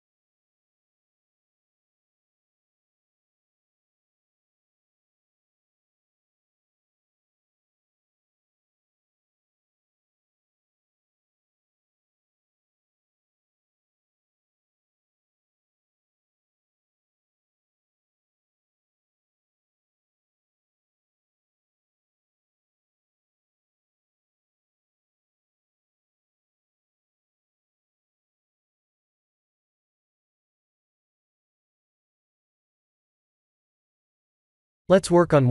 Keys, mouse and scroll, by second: 1.0 g, 3.1 click, 3.5 b, 4.5 g, 5.5 ctrl+z, 5.8 click, 7.8 b, 9.0 b, 10.2 g, 11.6 r, 12.6 click, 13.8 click, 15.2 click, 16.0 g, 18.7 r, 20.6 click, 20.9 g, 21.8 Tab, 22.4 middle click, 26.0 middle click, 26.3 middle click, 28.2 middle click, 28.8 scroll down 1, 29.1 shift+middle click, 29.5 shift+middle click, 29.9 shift+middle click, 29.9 scroll up 1, 31.0 Tab, 31.6 Tab, 31.9 middle click, 32.3 middle click, 32.6 KP_1, 33.7 shift+z, 34.3 shift+z.